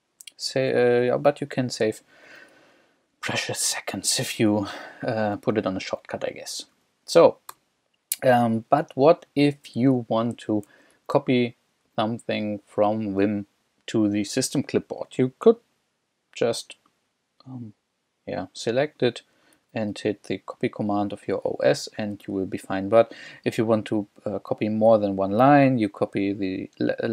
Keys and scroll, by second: 1.1 j, 1.8 j, 2.3 k, 3.1 k, 4.2-7.5 typing, 8.6 k, 9.1 k, 10.0 j, 10.7 j, 11.8 j, 12.5 k, 14.5 j, 19.6 super+c, 21.6 j, 22.4 j.